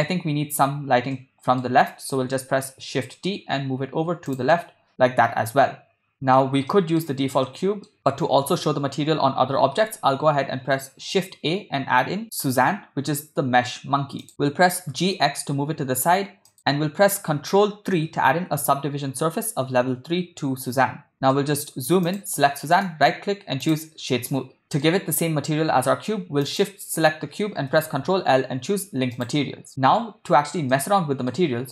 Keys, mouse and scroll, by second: 1.2 middle click, 1.9 middle click, 2.9 shift+d, 4.5-5.5 middle drag, 6.1 middle click, 6.7-7.0 ctrl+middle drag, 7.5 middle click, 9.8 shift+a, 14.5 g, 21.4-21.8 shift+middle drag, 22.1 click, 23.0-24.2 right drag, 24.3-24.8 ctrl+middle drag, 26.5-26.9 shift+drag, 28.2 ctrl+l, 30.7-31.3 shift+middle drag.